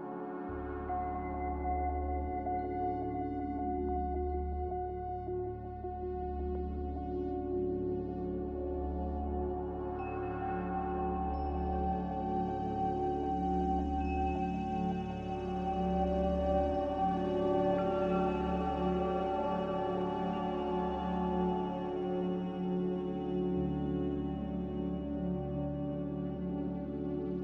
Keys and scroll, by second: 0.0 r, 2.5 a, 6.2 r, 7.7 a, 11.6 m, 12.8 a.